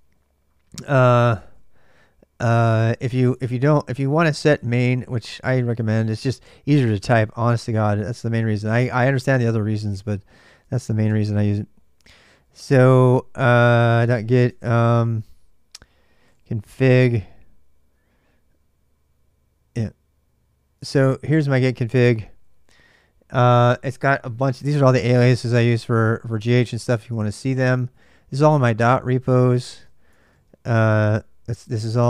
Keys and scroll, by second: 0.0-6.4 typing, 3.0 Tab, 6.5 Tab, 10.0-14.6 typing, 15.8-16.7 typing, 19.6 Return, 20.6 ctrl+[, 20.6 ctrl+j, 20.8-21.6 typing, 23.2-31.6 typing, 27.6 ctrl+[.